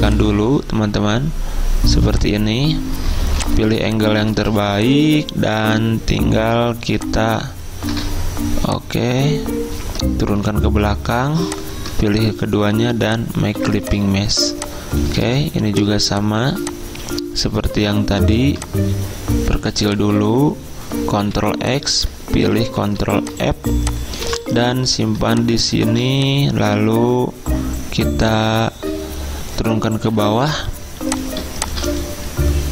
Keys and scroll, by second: 3.3 z, 4.6 v, 10.4 ctrl+[, 13.6 z, 15.3 v, 21.3 ctrl+x, 22.5 ctrl+f, 23.1 z, 24.4 v, 30.2 ctrl+[.